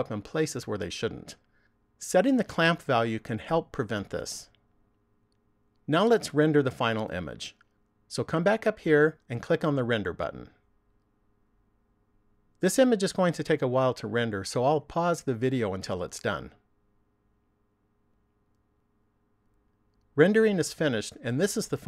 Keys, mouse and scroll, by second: 8.1 click, 10.7 click.